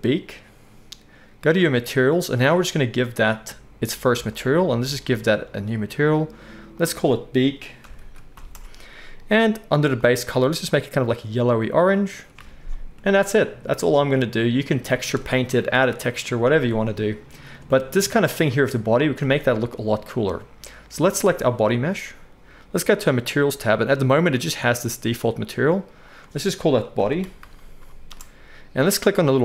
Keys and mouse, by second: 1.7 middle click, 1.9-4.3 right drag, 4.3-10.0 middle drag, 10.0-21.1 right drag, 12.4 alt+a, 21.1 middle click, 21.3-26.0 right drag, 26.0-29.4 middle drag.